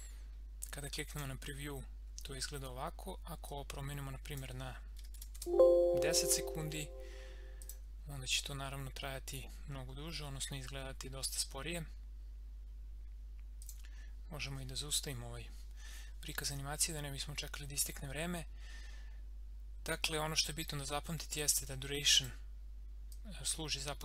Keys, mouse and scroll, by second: 1.1 click, 3.5-5.3 drag, 5.3 Tab, 7.5 click, 13.6 click, 21.3-24.0 drag.